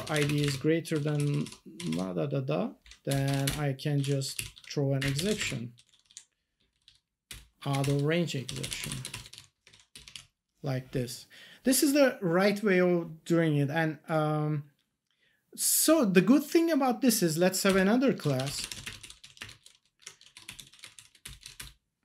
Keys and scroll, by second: 0.0-0.9 typing, 3.4 Return, 3.7-6.5 typing, 6.7 Down, 7.8-9.8 typing, 10.1 ctrl+s, 17.6 Return, 18.0-21.4 typing, 21.5 Return.